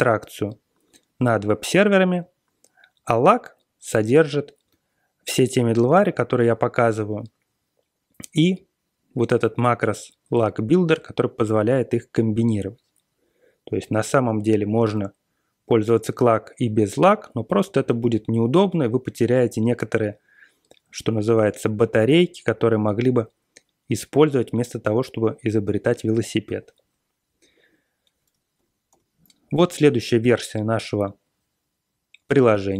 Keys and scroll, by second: 28.5 super+=, 28.8 super+=.